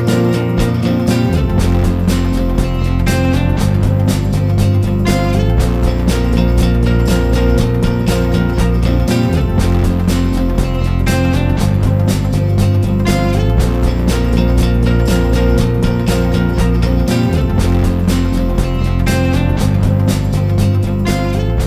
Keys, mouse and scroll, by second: 3.1 ctrl+scroll, 3.9 scroll, 3.9-5.0 scroll up 1, 6.3-11.6 drag, 12.1-12.7 scroll up 1, 12.8-21.6 drag.